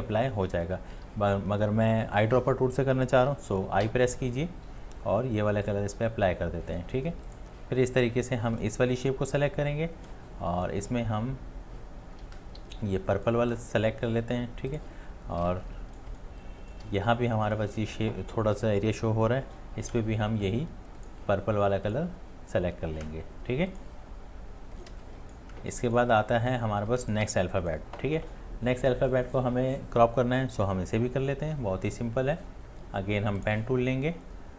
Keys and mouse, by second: 0.9 ctrl+z, 15.7 ی, 15.7 space, 16.6 click, 24.9-26.9 typing, 27.0 click.